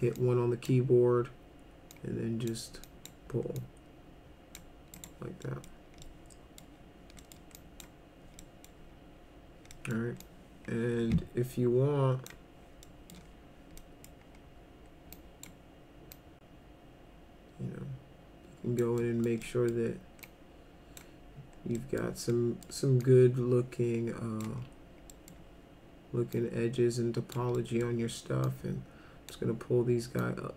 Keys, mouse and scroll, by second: 0.2 click, 1.9 click, 2.8 click, 3.6 click, 5.0 right click, 5.5 middle drag, 6.1-6.6 middle drag, 7.2 middle drag, 7.6 drag, 8.4 middle drag, 9.7 middle drag, 10.2-12.3 drag, 12.9 middle click, 13.8 middle click, 15.2 click, 16.2-18.8 drag, 19.0 middle drag, 19.4 middle drag, 20.2-21.0 drag, 21.8 middle click, 22.3 middle click, 23.0-24.4 drag, 25.1 middle drag, 26.3-27.3 drag, 27.5 middle click, 28.4-29.3 drag, 30.2-30.5 drag.